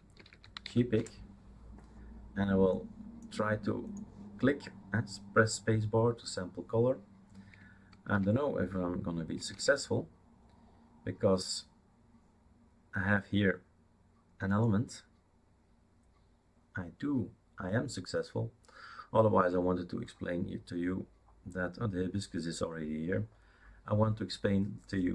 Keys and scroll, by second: 0.0-1.1 typing, 9.6 super+space.